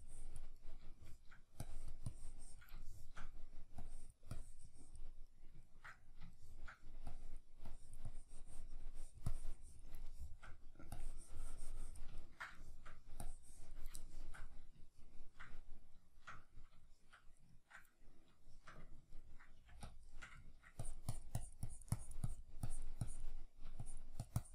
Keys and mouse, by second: 0.6-1.7 middle drag, 1.7-2.9 drag, 2.9 shift+middle click, 3.8-5.3 drag, 5.3-7.1 middle drag, 7.1-10.1 drag, 10.1 shift+middle click, 10.9-12.2 drag, 12.2-13.2 ctrl+middle drag, 13.2 click, 14.0-20.8 shift+middle drag, 19.6 f, 19.9 shift+click, 20.8-24.5 drag.